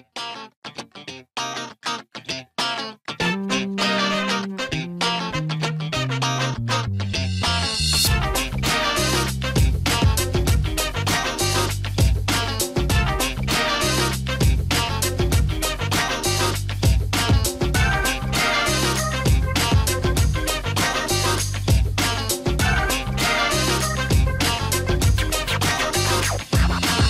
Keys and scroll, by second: 2.2-3.6 typing, 24.2-26.1 typing.